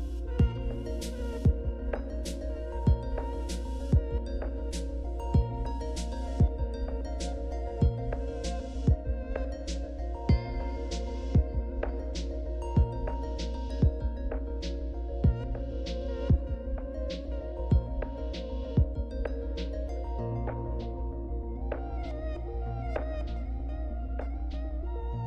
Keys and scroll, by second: 15.4 alt+Tab, 15.7 alt+Tab.